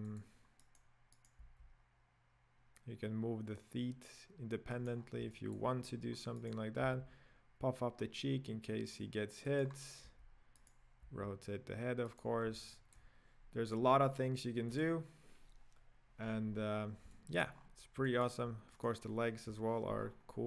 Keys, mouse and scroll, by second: 0.8 right click, 1.3 right click, 1.5 g, 5.0-5.3 scroll down 4, 5.3-5.8 shift+middle drag, 5.8 scroll up 2, 6.6 right click, 7.0 s, 9.9-10.7 scroll down 4, 10.7-11.1 right drag, 11.1 r, 12.7-13.2 shift+middle drag, 13.2 scroll down 2, 14.2 click, 14.8 drag, 16.4-17.1 scroll down 4, 17.1-17.6 shift+middle drag, 17.6-18.0 scroll up 4, 18.0-18.9 middle drag, 18.9-19.5 right drag, 19.5 KP_Decimal, 20.0-20.4 scroll down 12.